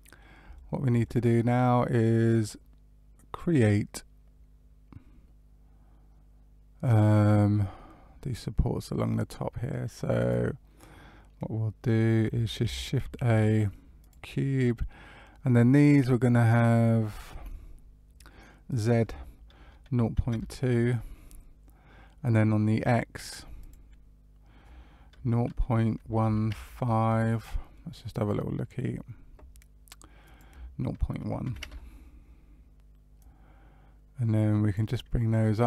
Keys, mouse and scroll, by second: 0.5 shift+middle click, 1.0 middle click, 10.1 click, 12.6 shift+a, 18.6 click, 23.5 click, 27.7 middle click, 30.2 click, 33.1 click, 35.4 middle click.